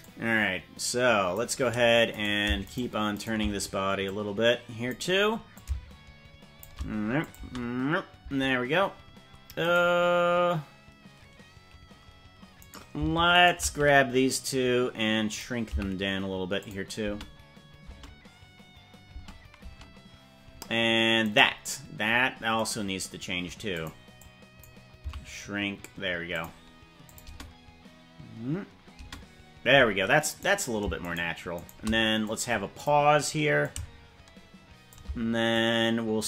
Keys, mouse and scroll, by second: 0.0-1.3 drag, 2.3 right click, 2.7 shift+right click, 3.3 right click, 4.0 click, 5.5-6.6 shift+drag, 7.2 click, 7.3 space, 8.3 space, 9.7 right click, 12.7 right click, 13.3 shift+right click, 15.3 click, 15.7 s, 17.1 space, 17.9 space, 19.1 space, 19.7 space, 21.3 right click, 22.7 right click, 23.7 click, 24.1 click, 25.1 s, 27.0 click, 27.3 space, 29.1 space, 30.5 right click, 31.1 shift+right click, 31.7 right click, 32.2 click, 33.5-34.9 shift+drag, 35.5-36.2 drag.